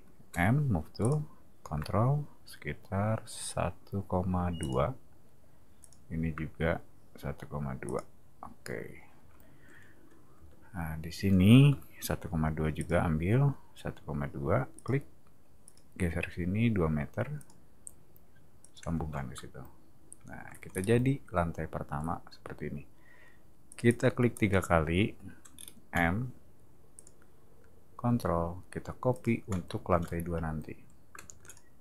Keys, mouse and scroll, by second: 0.3 m, 1.0 click, 4.6 click, 5.8 click, 7.8 click, 10.3 space, 11.7 l, 12.7 click, 14.8 click, 15.6 click, 17.4 click, 18.6 click, 18.9 space, 20.7 scroll down 2, 23.7 click, 23.9 click, 24.3 click, 25.5 scroll down 2, 25.9 m, 26.9 click, 29.1 click, 31.3 space, 31.4 click.